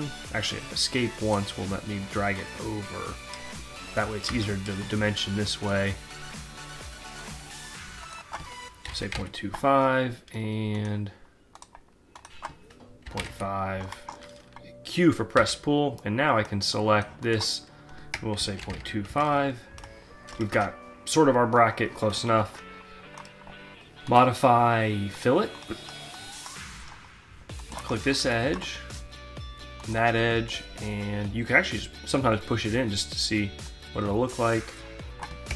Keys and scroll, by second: 1.2 Escape, 4.3 d, 8.5 2, 9.2 Return, 13.1 Delete, 13.2 5, 13.3 Return, 15.3 q, 18.2-19.2 typing, 20.5 alt+Tab, 35.3 Return.